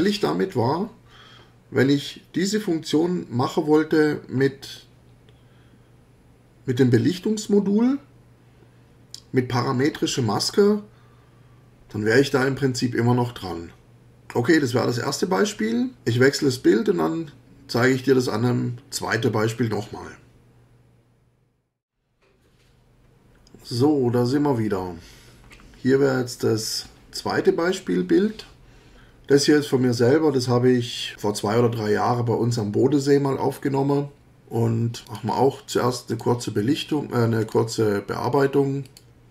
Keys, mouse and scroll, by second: 35.1 click, 36.1 click, 37.4 click, 38.8 click.